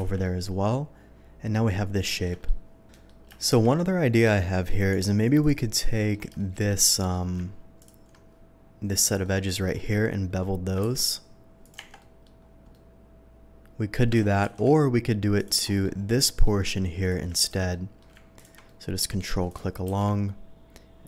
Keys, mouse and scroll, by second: 0.0 shift+2, 0.2-1.6 shift+middle drag, 2.1 shift+middle click, 2.4 shift+middle click, 2.9 middle click, 3.3 shift+middle drag, 4.1 shift+click, 4.3 shift+middle drag, 4.9 Tab, 5.4 click, 5.8 middle click, 6.3 shift+middle click, 6.8 shift+middle click, 7.8 ctrl+click, 8.9 ctrl+click, 9.2 ctrl+middle click, 9.7 ctrl+middle click, 10.8 ctrl+b, 11.6 click, 11.8 Tab, 11.9 middle drag, 12.7-13.9 middle drag, 14.2 ctrl+z, 14.4 ctrl+z, 15.3 click, 15.6 middle click, 16.2 middle click, 17.0 click, 17.4 ctrl+click, 17.7 middle click, 18.3 ctrl+click, 18.6 ctrl+middle click, 18.9-19.4 ctrl+scroll up 1, 19.4 ctrl+click, 19.8 ctrl+b.